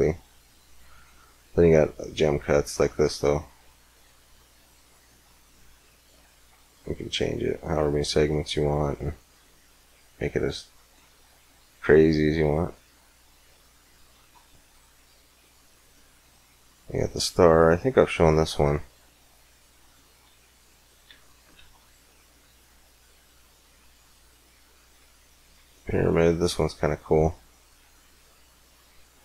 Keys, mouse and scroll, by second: 1.0 middle click, 1.6-5.9 middle drag, 7.1-8.9 drag, 11.5-13.2 drag, 13.3 click, 13.7 x, 14.0 shift+a, 15.3 click, 17.3-18.8 middle drag, 18.8-20.6 drag, 20.2 x, 20.9 x, 21.4 shift+a, 27.9-29.2 drag.